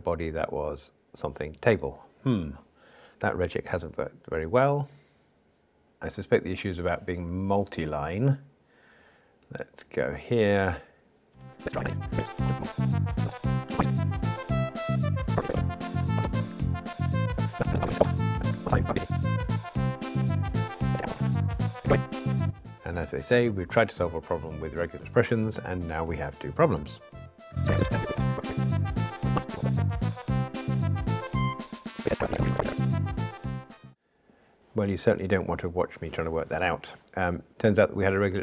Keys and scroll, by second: 13.0 Return, 13.2 ctrl+r, 15.7 Return, 16.5 ctrl+r, 18.5 ctrl+r, 21.4 ctrl+r.